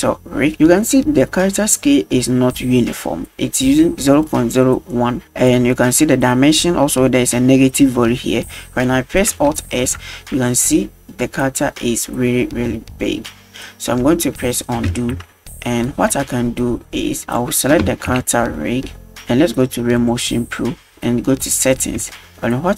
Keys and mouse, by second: 9.8 alt+s, 15.0 ctrl+z, 17.3 right click, 18.2 KP_Decimal, 20.0 click, 21.7 click, 22.2-22.5 shift+middle drag.